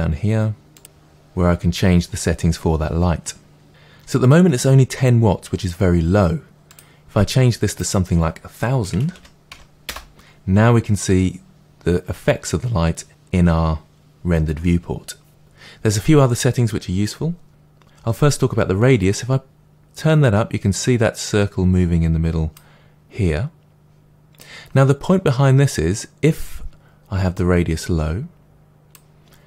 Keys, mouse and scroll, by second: 0.7 drag, 7.6-19.0 drag, 9.1 0, 9.8 0, 10.1 Return, 24.1 click, 27.3-29.4 drag.